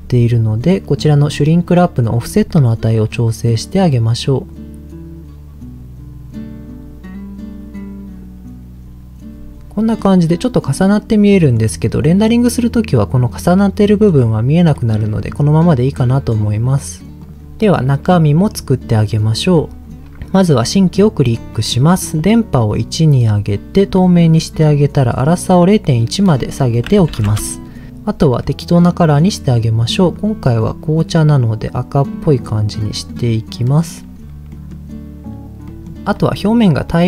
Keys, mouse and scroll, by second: 2.4-9.3 shift+drag, 9.3 middle click, 9.8 middle click, 10.8-11.4 scroll down 2, 11.3 middle click, 12.0 middle click, 13.6 middle click, 14.7 middle click, 16.1 click, 16.2 right click, 17.2 click, 17.3 scroll down 2, 17.4 middle click, 18.0 click, 18.5 middle click, 19.3 click, 20.6 click, 21.2 scroll down 1, 21.5 middle click, 22.7 click, 24.2 middle click, 25.0 click, 26.2-27.2 drag, 28.4 middle click, 29.2 click, 33.0 click, 33.6 middle click, 34.5 middle click, 35.6 middle click, 36.0 scroll up 2, 36.1 middle click, 36.9 middle click.